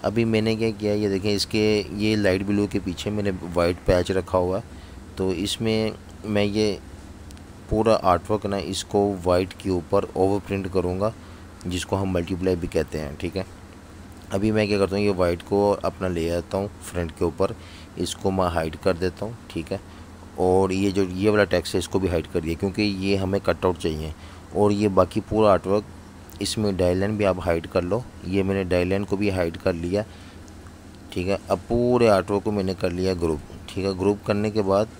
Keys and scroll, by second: 6.7 super+z, 9.4 super+3, 11.1 alt+super+3, 12.7 super+3, 14.0 super+z, 16.0 shift+super+], 17.4 alt+super+3, 18.4 super+3, 20.6 super+3, 22.3 super+3, 24.7 super+3, 27.3 super+3, 34.8 alt+super+3.